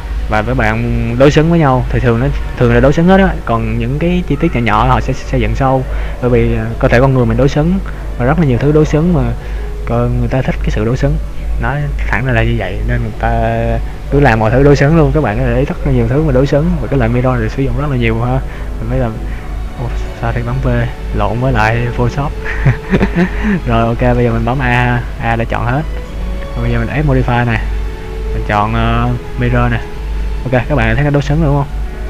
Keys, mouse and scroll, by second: 2.4 middle click, 18.6 v, 24.8 a, 26.6 click, 31.1 middle click.